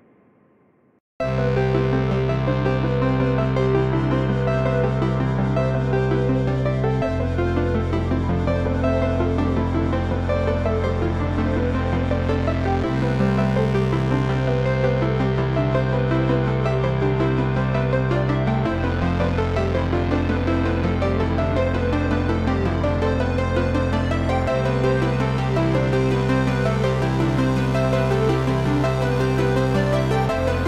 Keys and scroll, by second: 0.1 ., 3.7 8, 4.6 Return, 16.3 space, 17.8 Escape, 24.2 ctrl+c, 25.5 ctrl+v, 26.7 Down.